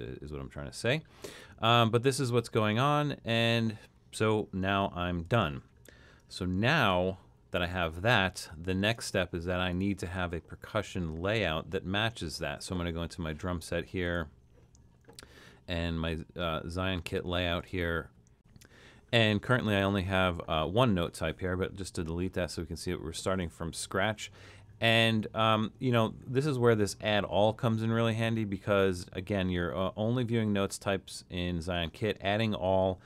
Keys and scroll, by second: 6.8 super+k.